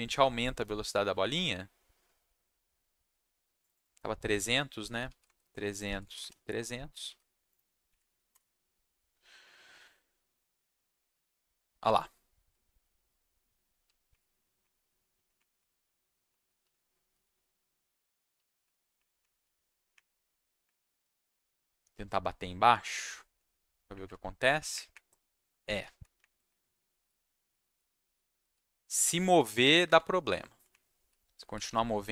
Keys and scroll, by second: 7.0 ctrl+s, 7.9 Up, 8.3 Return, 10.9 Down, 12.5 s, 13.0 s, 13.8 w, 14.1 Up, 14.7 Down, 15.1 Up, 15.3 Up, 15.7 Down, 16.3 w, 16.5 Down, 16.6 s, 17.2 w, 18.3 s, 18.6 Down, 18.9 Up, 19.4 Down, 19.9 Up, 20.7 s, 21.0 w, 21.9 s, 22.6 s, 23.0 Down, 23.9 Up, 24.1 Down, 24.7 Up, 25.8 Down, 26.2 Up, 26.4-29.0 typing, 29.2 Down, 29.4 Down, 29.6 Down, 29.8 Down, 30.7 Up, 31.1 w, 31.6 s.